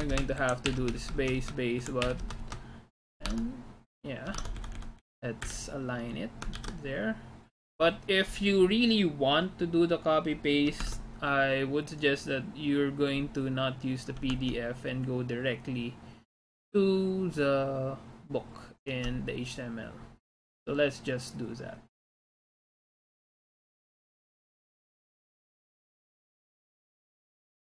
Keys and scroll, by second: 0.0-1.2 typing, 0.4 Down, 0.7 Home, 1.9 Down, 2.1 Home, 2.2 space, 3.4 alt+Tab, 4.5 alt+Tab, 4.6 Up, 4.8 Up, 5.0 Up, 5.6 Delete, 6.7 ctrl+s, 11.0 alt+Tab, 14.3 alt+Tab.